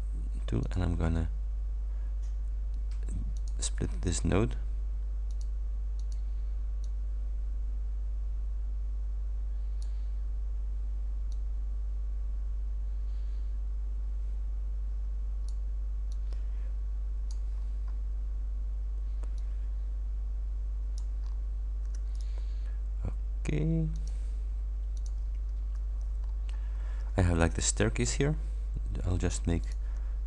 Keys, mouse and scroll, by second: 0.7 click, 3.4 click, 5.3 click, 6.0 click, 6.9-10.1 ctrl+drag, 11.4-15.7 ctrl+drag, 16.2-17.6 ctrl+drag, 17.6-18.4 ctrl+scroll up 4, 19.5-21.3 ctrl+drag, 21.3-21.7 ctrl+scroll down 2, 22.2 ctrl+click, 24.0 click, 25.1 click, 26.3-26.6 shift+scroll up 2, 26.8 shift+scroll up 2, 29.7 click.